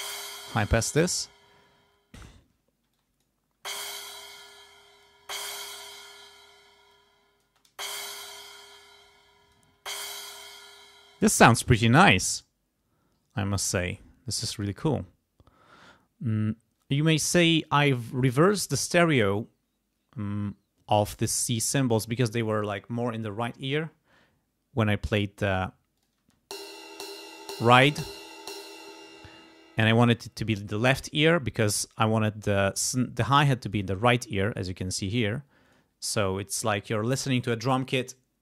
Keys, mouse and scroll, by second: 2.9 space, 2.9 click, 3.6 space, 4.8 space, 4.8 click, 6.9 click, 7.5 space, 8.7 space, 9.1 click, 9.8 space, 10.9 space, 13.9 click, 26.0 click, 26.2 space, 28.7 space, 33.7 click, 35.7 click.